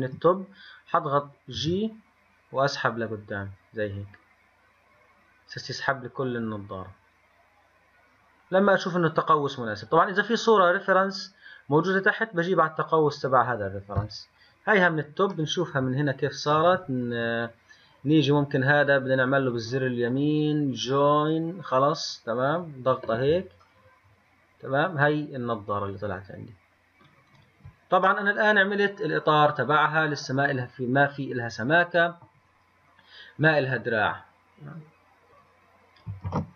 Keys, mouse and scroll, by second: 1.8 g, 1.9 g, 15.6-21.7 middle drag, 19.5 right click, 20.4 right click, 21.7-23.9 right drag, 23.9-26.9 middle drag, 27.6 click, 28.3-31.4 middle drag, 36.5 ctrl+s.